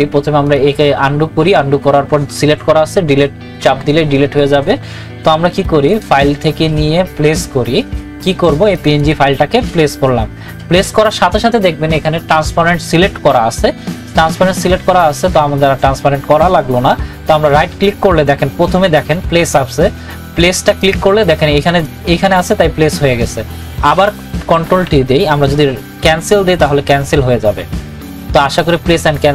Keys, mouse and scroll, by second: 5.9 click, 17.5 right click, 19.6 right click, 20.8-24.6 drag, 24.6 ctrl+t, 25.4 right click, 26.6 click.